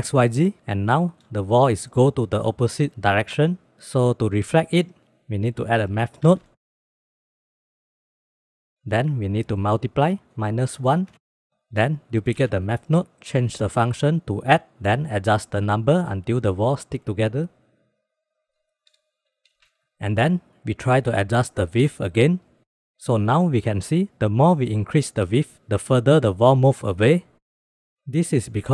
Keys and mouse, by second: 1.0 shift+middle click, 5.9 shift+a, 9.0-9.9 drag, 10.2-11.5 drag, 11.9 shift+d, 13.5-14.3 drag, 15.9 click, 16.9 shift+b, 17.9 click, 19.3 click, 21.5 click, 22.3 click, 22.6 click, 23.1 click, 23.8 click, 24.5 click, 25.7 click, 26.6 ctrl+z, 26.9 ctrl+z, 27.0 ctrl+z, 27.1 ctrl+z, 27.2 ctrl+z, 27.4 ctrl+z, 27.8 ctrl+z.